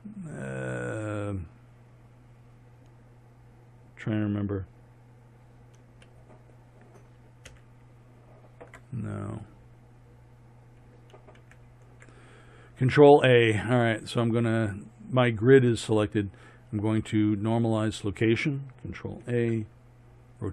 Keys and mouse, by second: 0.1 middle click, 0.3 middle drag, 7.5 ctrl+shift+a, 11.4 ctrl+a, 19.3 ctrl+a.